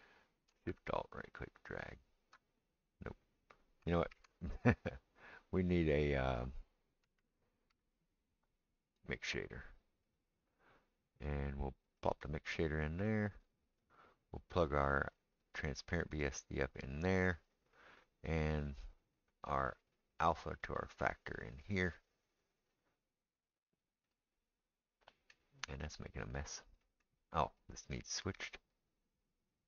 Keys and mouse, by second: 4.1 shift+a, 13.1-24.5 drag, 17.8-19.6 right drag, 22.4-27.0 middle drag, 22.4-24.5 right drag, 27.0-29.6 drag.